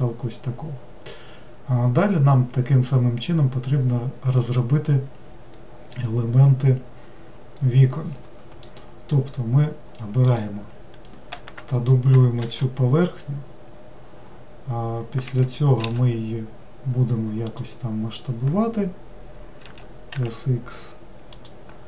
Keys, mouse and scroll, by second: 10.3 click, 12.4 shift+d, 15.8 s, 19.6 s.